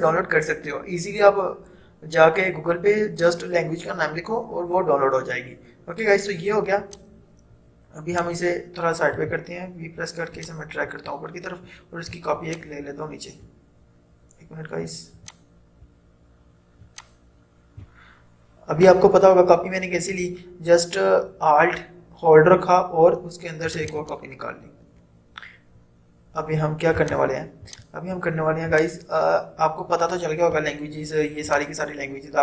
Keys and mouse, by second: 6.9 click, 9.3 v, 10.5-20.5 drag, 23.8 click, 27.1-31.7 drag.